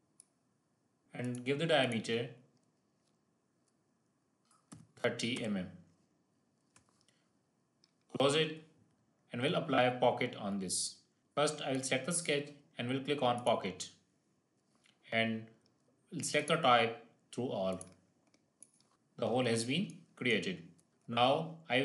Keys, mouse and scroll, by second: 0.4 click, 6.2 scroll up 1, 8.0 click, 10.1-11.2 scroll down 1, 11.2 click, 16.3 click, 18.9 1, 19.0 scroll up 1, 19.8 shift+middle click, 20.4-20.9 scroll up 3, 20.9-21.8 shift+middle drag.